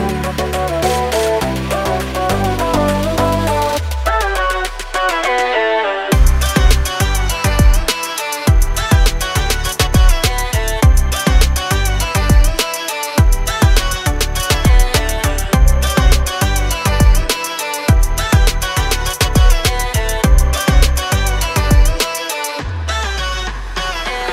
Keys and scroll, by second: 1.5 Delete, 2.4 m, 6.6 Up, 8.7-11.2 typing, 10.8 Return, 13.5-15.1 typing, 21.7 space, 22.5 r.